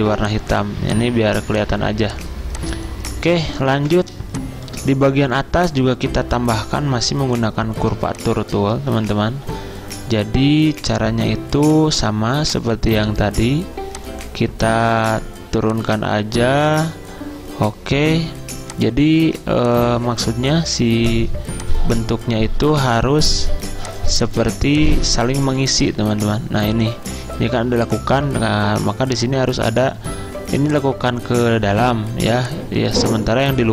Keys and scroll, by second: 2.3 z, 3.5-4.3 typing, 7.2 ~.